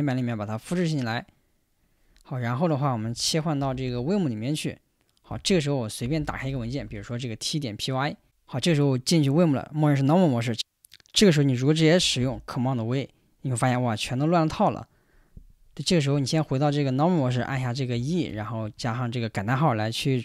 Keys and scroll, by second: 5.7-7.3 typing, 8.2 Return, 12.2 super+v, 15.9 Escape, 17.4 shift+;, 17.9 e, 18.6 shift+1.